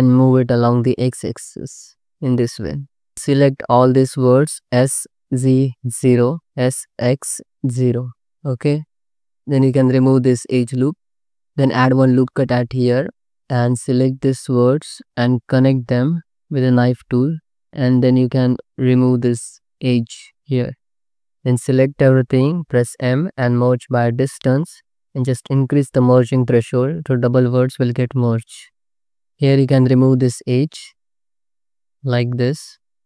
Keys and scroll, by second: 4.8-7.5 typing, 8.2 alt+z, 9.5 2, 10.8 ctrl+x, 12.1 ctrl+r, 13.1 1, 15.5 space, 16.6 c, 17.2 2, 20.7 ctrl+x, 21.3 a, 22.8 m, 30.6 ctrl+x, 32.1 ctrl+x.